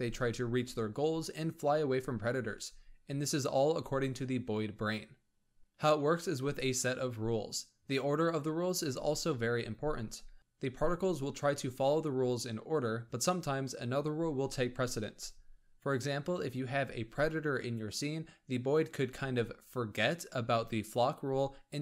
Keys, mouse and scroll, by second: 1.3-2.4 scroll down 13, 2.7 click, 4.3-5.6 drag, 5.6-6.1 scroll down 8, 6.1 click, 6.8-7.3 scroll down 4, 10.1 space, 11.3-14.4 middle drag, 15.6-16.4 middle drag, 16.4 click, 16.5 g, 19.6 space, 19.9 click, 20.3 middle click, 20.8-21.8 scroll down 12.